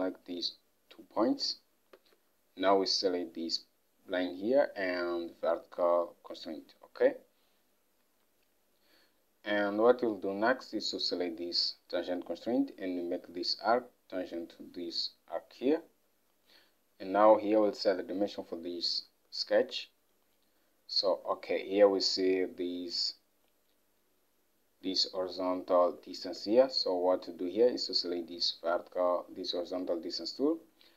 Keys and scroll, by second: 2.0 Escape, 19.6 alt+Tab, 26.3 alt+Tab.